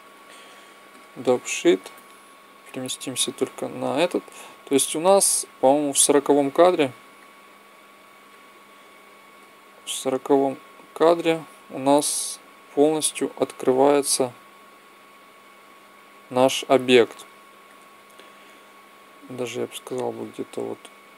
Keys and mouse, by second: 0.8 click, 7.3-11.2 drag, 11.3 click, 18.9-20.8 drag.